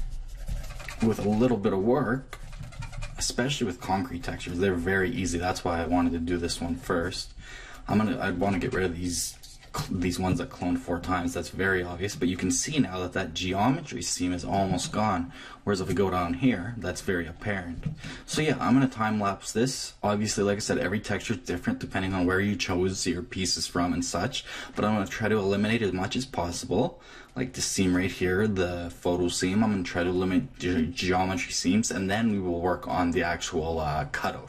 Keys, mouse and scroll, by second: 10.6-14.1 middle drag, 14.7 Left, 15.2-17.6 middle drag, 20.1 click.